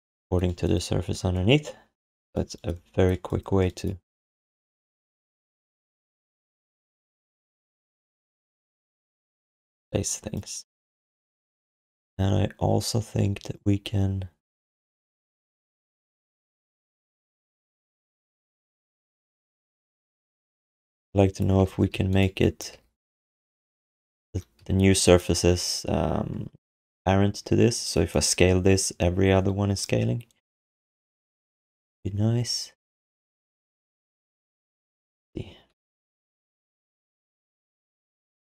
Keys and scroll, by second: 4.4 q, 6.5 r, 21.7 ctrl+z, 21.9 q, 22.7 r, 24.2 ctrl+z, 24.6 q.